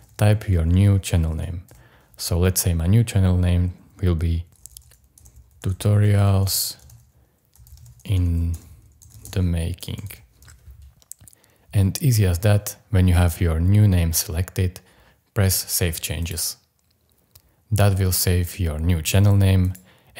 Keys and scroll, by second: 1.7 BackSpace, 4.5-10.4 typing.